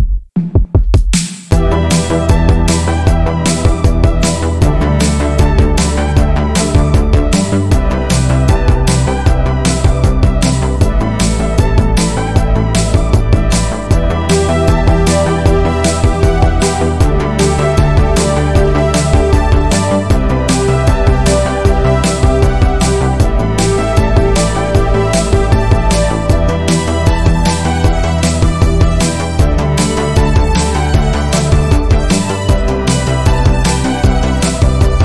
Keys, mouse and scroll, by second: 0.0 shift+middle click, 0.7 1, 1.3 click, 1.6 middle click, 2.2 g, 3.2 middle click, 3.9 click, 4.1 g, 5.0 middle click, 6.0 2, 6.4 click, 6.8 shift+click, 7.2 shift+click, 7.8 click, 8.3 shift+click, 8.7 shift+click, 9.1-10.4 middle drag, 10.4 click, 11.5 middle click, 12.5 ctrl+r, 13.3 middle click, 13.9 ctrl+r, 15.1 Tab, 15.3 scroll down 2, 15.4-16.9 middle drag, 16.9 Tab, 17.2-18.4 middle drag, 18.4-19.2 scroll up 4, 18.7 shift+middle click, 20.2 click, 20.5 shift+click, 20.9 shift+click, 21.7 middle click, 22.6 click, 23.7 click, 24.0 shift+click, 24.3 shift+click, 24.9 click, 26.8 click, 26.9-27.9 middle drag, 27.9-28.6 scroll up 1, 28.6 1, 29.0 click, 29.2 middle click, 29.9 g, 32.3 click, 32.6 middle click, 33.2 click, 33.7 g, 34.9 middle click.